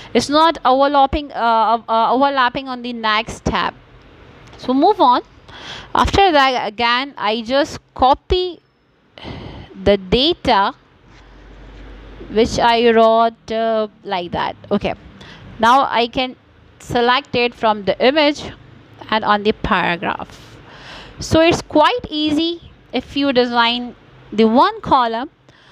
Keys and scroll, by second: 6.7 Return, 12.8 ctrl+c, 20.0 Return, 25.0 ctrl+v.